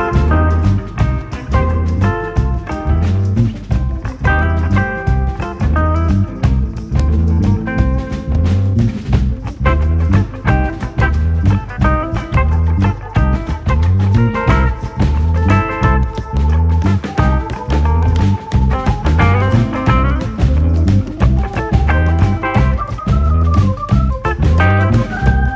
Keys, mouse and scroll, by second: 0.8 click, 1.2-1.8 scroll up 2, 1.4 shift+middle click, 1.8 shift+middle click, 2.7 g, 3.7 KP_1, 4.9 click, 5.2-5.6 scroll up 1, 5.6 shift+middle click, 5.9 click, 8.6 KP_1, 9.2 shift+middle click, 9.6 g, 10.4 KP_7, 11.4 r, 13.3 s, 14.3 click, 14.6 click, 16.2 click, 16.7 g, 18.0 click, 18.6-19.6 drag, 19.6 KP_1, 20.0 click, 20.9 click, 21.8 scroll down 1, 21.9 middle click, 22.3-22.7 scroll up 2, 22.7 KP_7, 23.2 g, 23.9-25.0 drag.